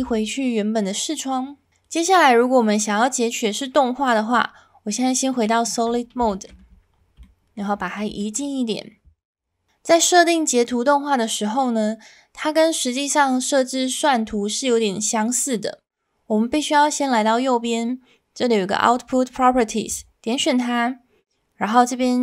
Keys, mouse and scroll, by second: 4.3 z, 6.3 shift+drag, 7.2-7.6 shift+middle drag, 7.8 middle click, 8.2 shift+middle click.